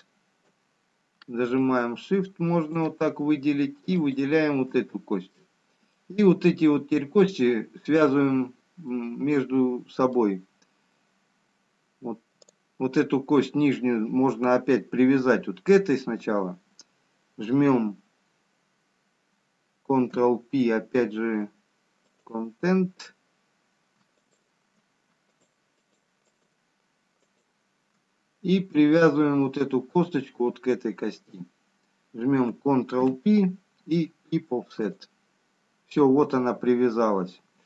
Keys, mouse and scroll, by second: 2.1 shift+click, 5.7 middle click, 10.7 middle click, 13.1 click, 20.8 ctrl+p, 24.6 shift+click, 33.6 ctrl+p.